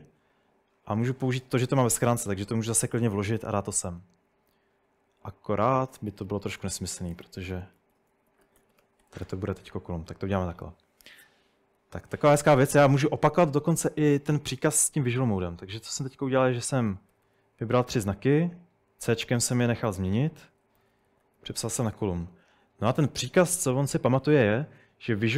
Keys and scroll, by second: 2.1 p, 5.6-10.5 typing, 8.8 Escape, 15.4-17.8 typing, 19.1 typing, 20.5-22.0 typing.